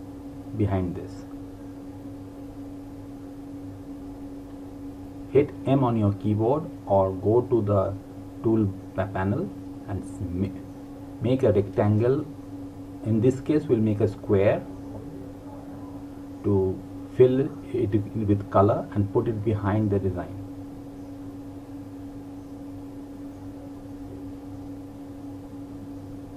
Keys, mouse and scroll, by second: 1.1 click, 16.0 click.